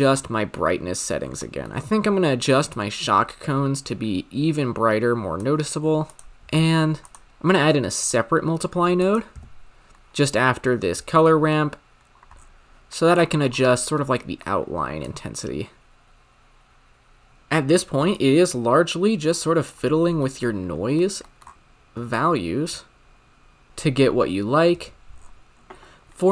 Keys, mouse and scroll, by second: 5.8 scroll down 8, 6.0 click, 6.4-7.1 scroll up 10, 7.1 shift+a, 8.9-11.3 drag, 11.3-15.1 middle drag, 15.1-17.3 drag, 17.3-18.1 scroll up 10, 18.1 scroll up 1, 18.2-20.0 shift+drag, 20.0-20.3 scroll down 7, 20.3-21.5 middle drag, 21.5-22.1 scroll up 6, 22.1-23.7 shift+drag, 23.7 space, 24.7 space, 25.1-26.1 scroll down 16, 26.1 click, 26.2-26.3 scroll down 3.